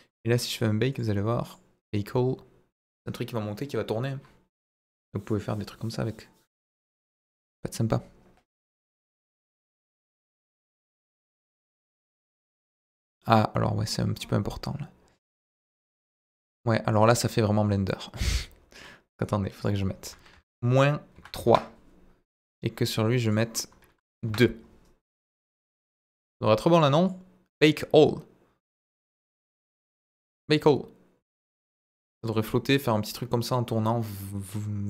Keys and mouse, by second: 1.4-10.9 drag, 11.8-16.9 drag, 18.1 click, 19.7-21.8 drag, 23.3-24.6 drag, 25.2 click, 26.9 click, 30.0-34.8 drag.